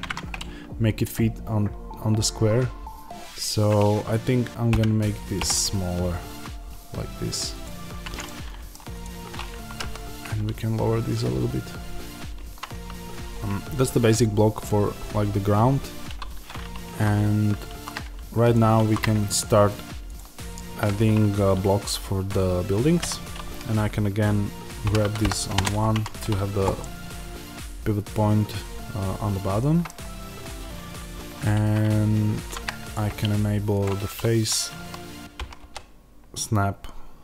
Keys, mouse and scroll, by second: 0.3 middle click, 4.7 g, 7.5 ctrl+click, 8.2 middle click, 8.8 click, 9.7 g, 13.1-18.4 shift+middle drag, 18.4 click, 20.0 shift+a, 22.9 Tab, 24.8 g, 25.5 KP_Enter, 25.8 Tab, 26.7-35.3 middle drag, 32.2 shift+Tab, 35.3-37.2 drag, 35.3 g.